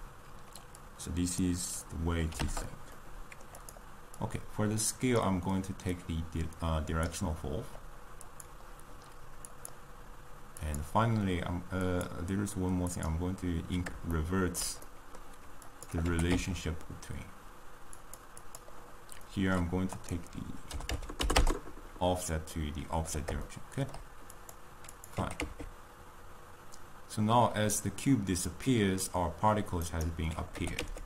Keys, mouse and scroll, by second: 9.6 click, 10.7 click, 11.8-14.2 drag, 14.2-15.8 ctrl+middle drag, 15.8 click, 16.2 g, 18.6 click, 21.6-22.6 drag, 22.6-24.5 middle drag, 24.5 click, 25.0 click, 25.5 g, 30.8 g.